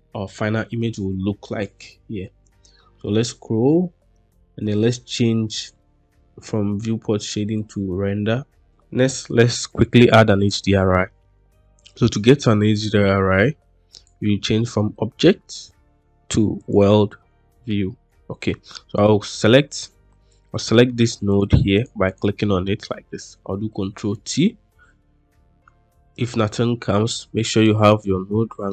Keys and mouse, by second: 13.8-16.8 drag, 20.6 middle click, 21.2 click, 21.7 click, 22.0 click, 24.0 ctrl+t, 26.0 click, 27.0 click.